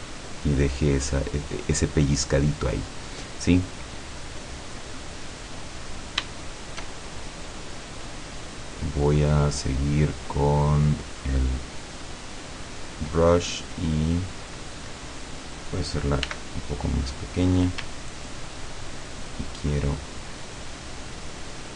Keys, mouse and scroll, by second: 0.7 click, 1.5 click, 2.2-2.6 scroll down 1, 3.8-4.2 scroll down 1, 4.5-4.9 scroll up 1, 4.9 scroll down 1, 5.3 scroll up 1, 5.8-6.4 scroll down 2, 6.4 shift+middle click, 7.0-7.7 shift+scroll up 1, 9.3 click, 10.7 click, 14.1-14.5 scroll up 1, 16.3 f, 17.2 click, 18.3-20.0 ctrl+drag, 20.5-21.7 ctrl+drag.